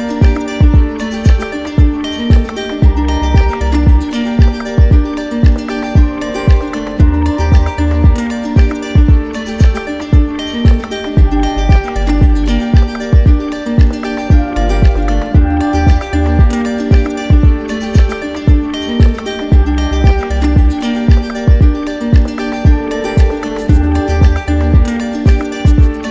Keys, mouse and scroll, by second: 0.2 w, 1.6 click, 2.3 shift+click, 5.7 click, 6.2 ctrl+click, 6.8 click, 8.0 ctrl+click, 9.3 ctrl+click, 9.7 ctrl+click, 10.1 w, 12.1 click, 12.7 ctrl+click, 13.0 q, 14.2 click, 15.8 click, 17.6 click, 18.1 alt+click, 19.3 alt+click, 20.7 click, 21.9 alt+click, 23.0-24.2 typing, 25.5 click.